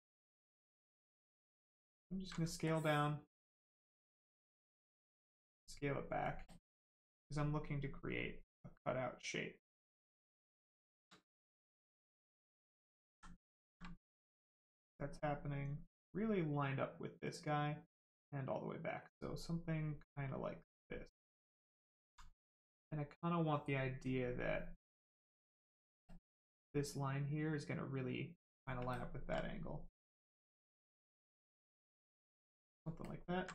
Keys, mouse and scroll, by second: 1.8 click, 2.6 ctrl+click, 4.5 click, 4.6 click, 6.5 ctrl+click, 9.8 right click, 11.1 alt+right click, 12.2 click, 13.1 ctrl+z, 13.5 ctrl+click, 14.1 click, 19.5 click, 22.0 alt+right click, 23.5 ctrl+right click, 24.8 ctrl+click, 26.7 click, 26.8 click, 28.9 ctrl+click, 31.9 click, 33.0 ctrl+click.